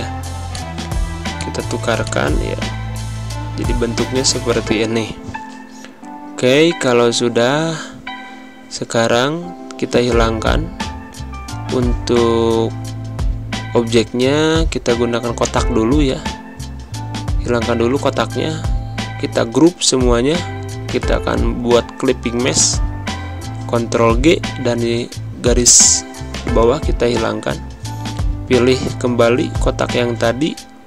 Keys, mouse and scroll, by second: 4.7 g, 6.4 click, 8.9-14.3 drag, 17.3-23.4 drag, 23.4 ctrl+g, 24.0 click, 25.6 Delete, 26.2-28.3 drag.